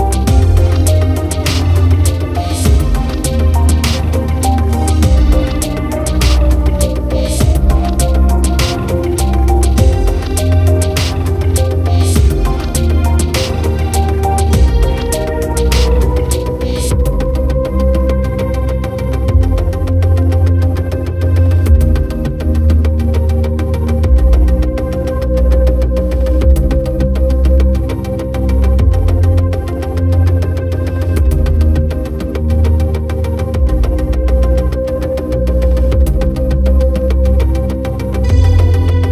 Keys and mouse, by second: 17.4 right click, 17.8 right click, 18.5 right click, 18.8 right click, 20.2 right click, 20.7 right click, 21.0 right click, 21.7 right click, 23.1 right click, 24.4 right click, 26.9 right click, 27.3 right click, 28.3 right click, 29.6 right click, 30.0 right click, 30.2 right click, 30.5 right click, 31.3 right click, 34.2 right click, 34.6 right click, 35.1 right click, 35.4 right click, 35.5 b, 36.6 right click, 36.9 right click, 39.0 right click.